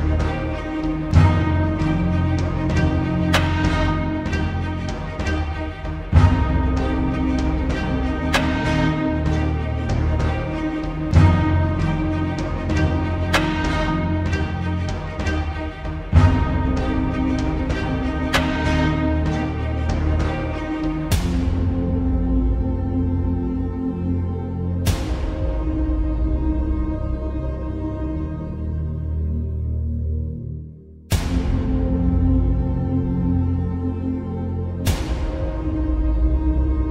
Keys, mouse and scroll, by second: 0.6-8.2 drag, 9.9 alt+scroll up 1, 10.2 space, 10.3-10.9 click, 11.2 t, 12.0-12.9 drag, 19.0 click, 22.2-36.9 drag.